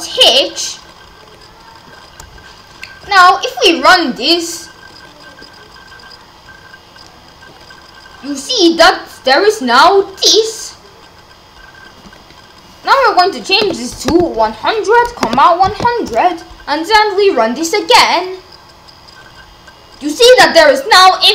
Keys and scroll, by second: 13.6 1, 14.1 0, 15.3 1, 15.7 0.